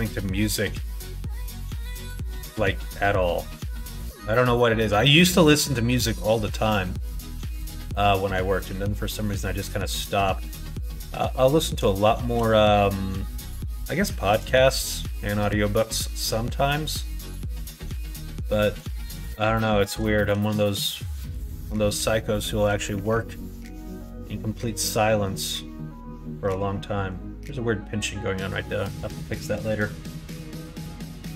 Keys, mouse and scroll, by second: 1.6 r, 5.7 middle click, 6.0 scroll down 1, 6.4 middle click, 7.4 middle click, 7.8 middle click, 8.1 scroll down 1, 8.5 middle click, 8.7 scroll down 1, 9.5 middle click, 10.0 middle click, 10.8 middle click, 11.2 middle click, 11.9 shift+middle click, 12.8 middle click, 13.4 middle click, 14.0 middle click, 14.4 shift+middle click, 15.1-16.4 middle drag, 18.4 middle click, 19.3 middle click, 21.0 middle click, 21.6 shift+middle click, 22.9 Tab, 23.4 click, 24.0 Tab, 24.4 middle click, 28.9 middle click, 30.1 middle click, 30.9 Tab, 31.2 middle click.